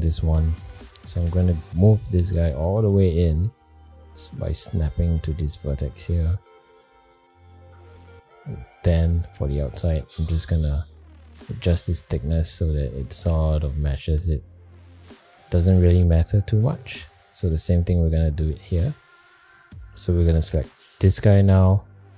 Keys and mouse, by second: 0.5 middle click, 1.2 shift+middle drag, 1.6 middle drag, 2.3 g, 6.2 middle drag, 7.3 shift+middle click, 8.1-8.6 middle drag, 10.0-13.8 shift+drag, 14.8 middle click, 15.9 middle click, 16.6 shift+middle click, 17.5 middle drag, 18.1 shift+middle click, 19.3 click, 19.5 ctrl+z, 21.1 middle click.